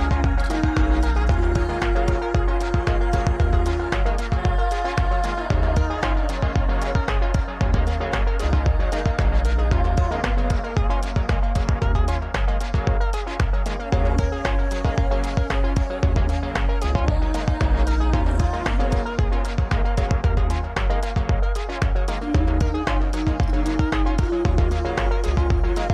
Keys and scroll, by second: 0.0 g, 0.7 g, 1.4 z, 4.7 Escape, 5.2 s, 6.6 ctrl+a, 8.8 g, 12.7 g, 13.7 alt+z, 14.1 g, 14.7 g, 15.3 g, 16.0 alt+z, 18.1 Tab, 18.6 BackSpace, 18.9 KP_7, 21.5 a, 23.1 ctrl+a, 23.7 Tab, 24.5 ctrl+a, 25.7 g.